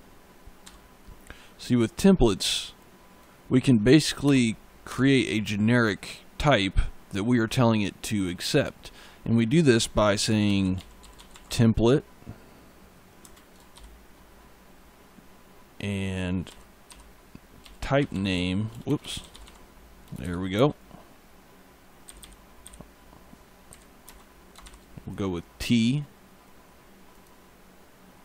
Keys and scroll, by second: 0.5 e, 4.1 BackSpace, 9.9-11.8 typing, 13.1 space, 16.3-20.4 typing, 21.9 Left, 23.5 Right, 23.9 space, 24.5 shift+t.